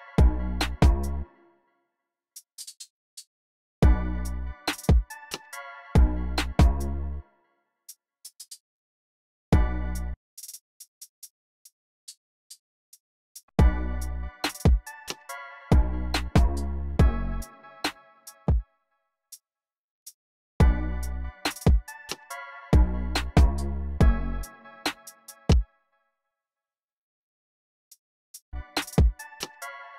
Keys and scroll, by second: 1.0 space, 3.6 space, 6.8 space, 8.1 alt+Down, 8.3 alt+Down, 9.3 space, 9.9 s, 13.1-14.4 typing, 17.2 e, 18.2 space, 20.4 space, 25.3-28.3 typing.